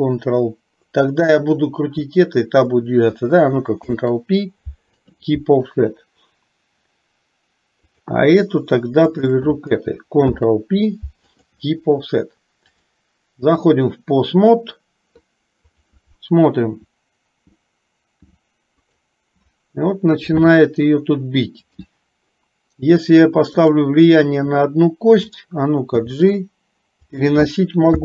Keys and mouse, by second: 3.8 ctrl+p, 8.1 click, 9.2 shift+click, 10.3 ctrl+p, 12.8-13.8 drag, 15.7 click, 16.7 r, 21.7 click, 25.3 click, 25.9 g.